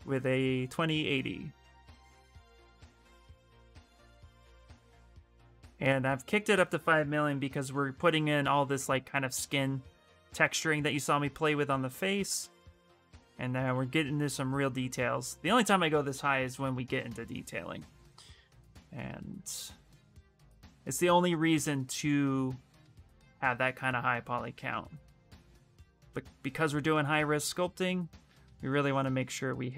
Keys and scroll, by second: 15.7-16.9 typing, 18.5 s.